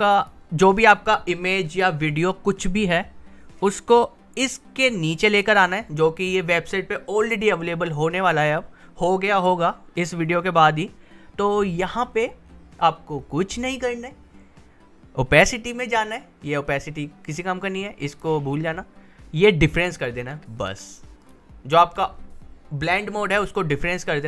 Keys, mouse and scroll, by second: 0.2 click, 3.6-5.4 drag, 12.0-12.6 scroll down 1, 15.4 scroll up 1, 18.1 click, 21.2 click.